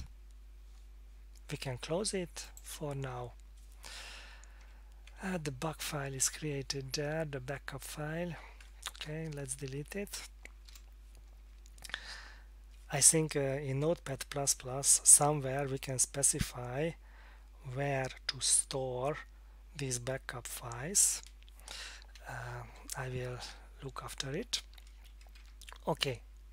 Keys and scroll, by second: 4.8 Down, 10.1 F8, 10.7 Return, 25.1 Up, 25.4 Down.